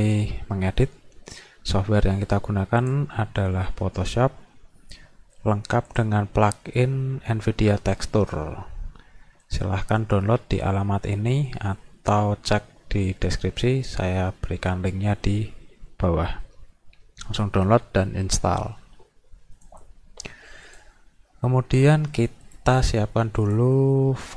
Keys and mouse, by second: 2.8 click, 9.5-10.7 drag, 19.6 click, 20.7 click, 21.9 click, 22.5 click, 22.8 right click.